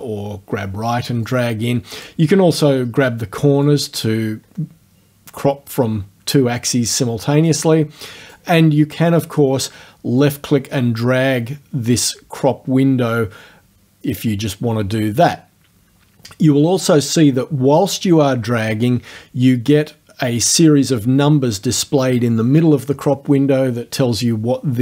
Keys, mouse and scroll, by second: 1.3 click, 3.7-8.5 drag, 10.2-14.5 drag, 15.4-24.8 drag.